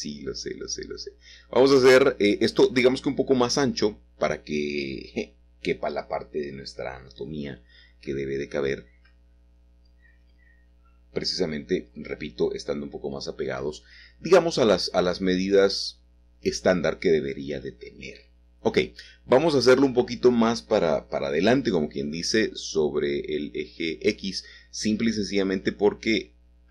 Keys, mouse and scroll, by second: 1.4 ctrl+KP_Add, 4.9 s, 7.2 click, 7.9-12.6 middle drag, 7.9-8.8 scroll down 1, 13.0 s, 14.6-15.7 drag, 16.1 g, 18.7-20.5 shift+drag, 23.1 g, 25.6 click, 26.0 middle click.